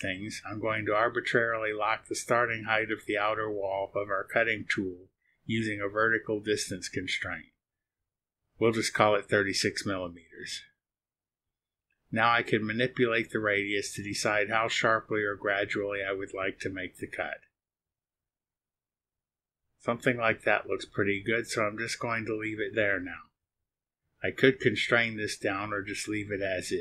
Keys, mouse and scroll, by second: 0.2 click, 1.8 click, 3.3 click, 6.6 KP_6, 7.2 KP_Enter, 11.2-19.7 drag.